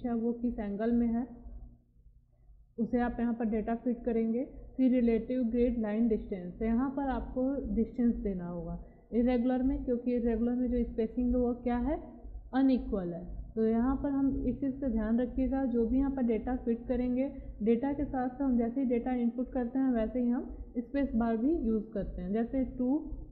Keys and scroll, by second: 22.7 2.